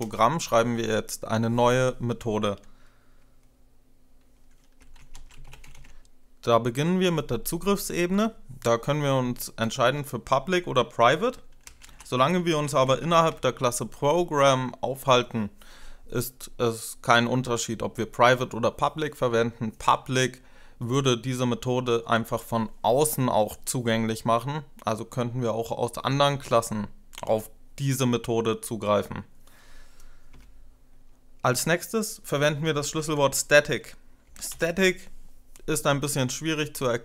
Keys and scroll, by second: 4.5-6.0 typing, 9.4 ctrl+BackSpace, 11.4-13.4 typing, 30.2 space, 32.3-34.6 typing.